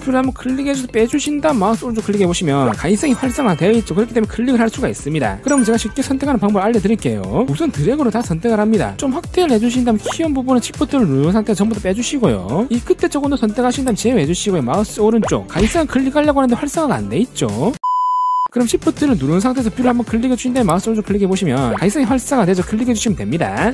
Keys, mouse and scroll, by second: 1.3 shift+click, 2.6 right click, 4.7 click, 8.1 click, 9.3 scroll up 2, 10.0 scroll up 1, 10.4 shift+click, 11.6 shift+click, 12.0 shift+drag, 12.5 shift+click, 14.7 shift+click, 15.3 right click, 20.7 shift+click, 21.6 right click, 23.1 click.